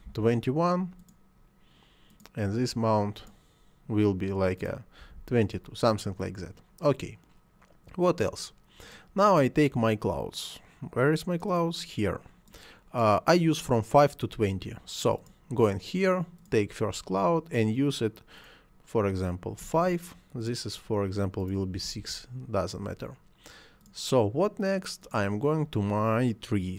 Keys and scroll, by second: 0.1 1, 5.0 2, 5.5 Return, 19.6 5, 21.7 6, 22.0 Return.